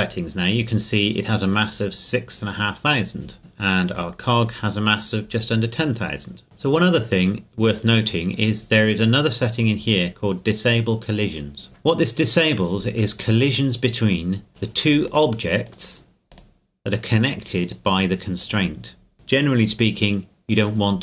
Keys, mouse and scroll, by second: 3.8 right click, 6.4 right click, 7.4 middle click, 11.6-12.9 scroll up 1, 13.4 scroll up 1, 13.4 right click.